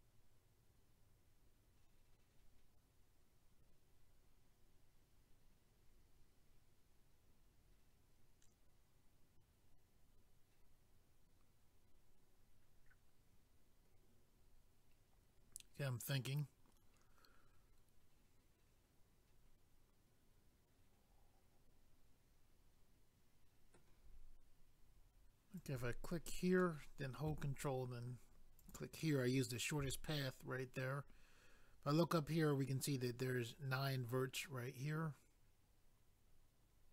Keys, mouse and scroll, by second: 25.6 click, 25.7 click, 26.6 middle click, 28.6 ctrl+click, 28.7 ctrl+click, 34.5 middle click.